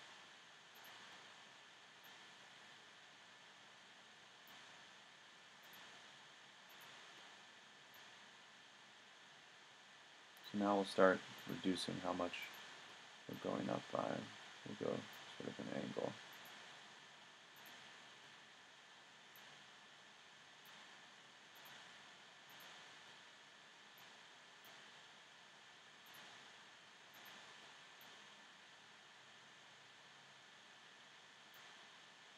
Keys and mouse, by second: 26.1 middle click, 28.9 click, 29.1 middle click.